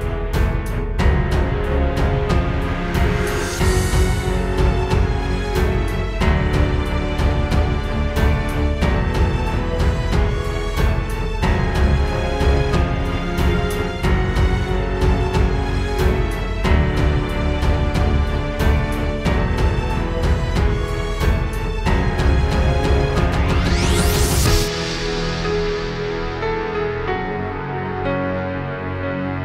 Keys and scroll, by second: 2.6 super+z, 3.3 super+z, 17.4-19.3 typing, 20.0 super+space, 23.7 super+z, 28.0 space, 28.3 space, 29.3 space.